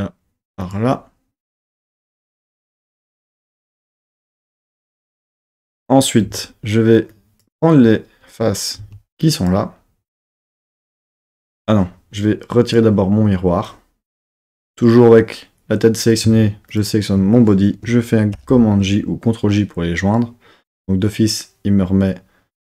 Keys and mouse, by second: 0.6 click, 6.2 4, 7.2 click, 8.8 3, 9.2 click, 9.9 click, 11.3 Tab, 12.6-14.1 drag, 16.6 shift+click, 18.3 super+j.